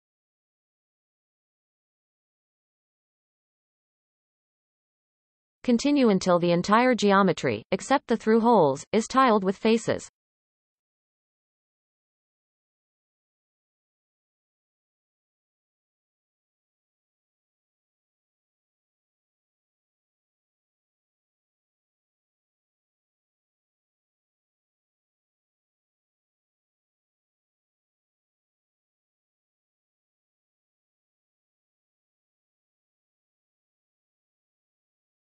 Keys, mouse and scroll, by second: 1.6 shift+click, 2.6 shift+click, 4.2 f, 5.2-10.4 shift+middle drag, 10.4 alt+a, 11.5-12.2 scroll up 4, 12.2 scroll down 2, 13.0 c, 19.9-20.2 scroll up 4, 20.2 shift+middle click, 20.4-20.9 scroll up 4, 20.6 shift+middle click, 21.3-21.8 scroll down 4, 21.5 shift+middle click, 21.8 shift+middle click, 22.1 shift+click, 22.3 shift+middle click, 22.4 scroll up 3, 22.7 shift+click, 22.8 shift+click, 22.9 shift+middle click, 23.4-24.3 scroll up 6, 23.9 shift+middle click, 24.3-24.6 scroll down 12, 24.6 shift+middle click, 24.8 scroll up 1, 25.3 shift+click, 25.4-26.2 scroll down 2, 25.6 shift+middle click, 26.2 shift+middle click, 26.4-27.1 scroll up 10, 26.5 shift+middle click, 27.6-28.1 scroll down 9, 28.1 shift+middle click, 29.0 f, 29.4-29.9 scroll down 1, 29.9-34.0 shift+middle drag, 35.0 alt+a.